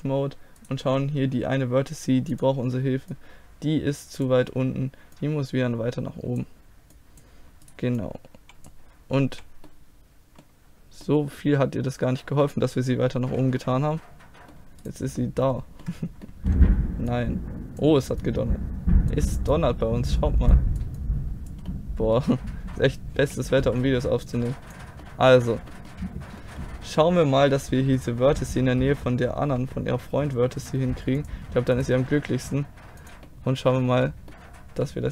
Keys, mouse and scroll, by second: 0.7-3.2 right drag, 2.4-9.7 drag, 7.7-9.6 right drag, 9.3 z, 9.7 middle click, 9.9 click, 11.4-13.0 middle drag, 13.2 z, 13.6 middle click, 14.9-16.8 right drag, 17.2 click, 17.3-18.3 middle drag, 21.7 middle click, 22.2 click, 22.8 middle click, 23.2 z, 24.3-26.5 drag, 26.5-29.5 middle drag, 29.5 g, 31.8-33.3 drag, 32.0 g, 33.3-35.1 middle drag.